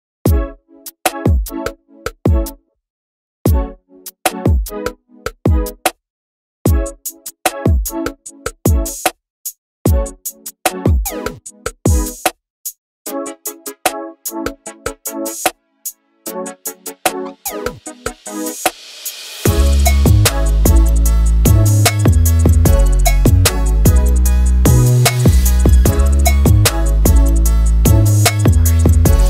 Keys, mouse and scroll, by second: 0.0 click, 0.3 ctrl+l, 0.7 r, 1.2 g, 2.4 click, 2.8 ctrl+l, 3.3-5.8 typing, 7.2 g, 7.5 s, 8.4 click, 8.8 ctrl+l, 9.3 s, 11.2 click, 11.4 scroll down 2, 11.5 alt+a, 11.6-12.3 scroll up 1, 12.3-16.1 drag, 16.4 click, 17.3 scroll up 1, 17.5 shift+middle click, 17.8 Tab, 17.9 s, 18.4 scroll up 1, 18.5 ctrl+r, 18.9 scroll down 1, 19.0 ctrl+r, 19.5-21.8 typing, 19.6 click, 20.2 click, 22.3 scroll up 2, 22.4 shift+click, 23.0 scroll down 2, 23.1 scroll up 1, 23.2 ctrl+click, 24.6 scroll down 1, 24.9 shift+click, 29.2 Left.